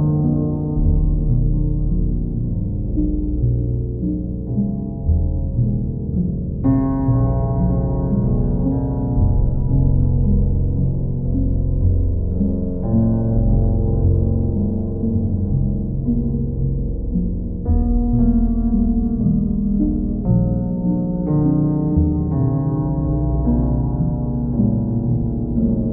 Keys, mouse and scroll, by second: 0.4 click, 1.3 click, 2.8 click, 4.0 right click, 7.4 click, 8.2 click, 9.1 click, 9.9 click, 11.4 click, 12.3 click, 13.5 click, 15.0 click, 15.5 click, 16.0 click, 16.4 click, 17.4 ctrl+z, 18.3 click, 19.8 click, 20.8 click, 21.4 click, 22.3 click, 24.8 click, 25.1 click.